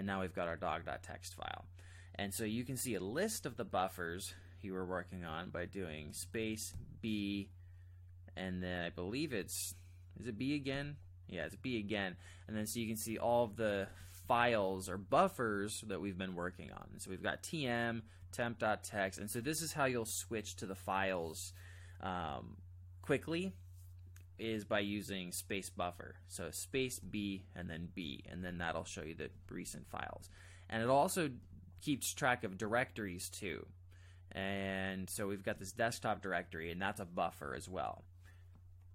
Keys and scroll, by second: 6.1 space, 6.8 b, 10.7 b, 13.8 ctrl+j, 14.2 ctrl+j, 14.8 ctrl+k, 16.7 ctrl+k, 18.2 ctrl+j, 28.4 ctrl+j, 28.5 ctrl+j, 28.8 ctrl+j, 29.3 ctrl+k, 29.5 ctrl+k, 29.7 ctrl+k, 35.5 Return.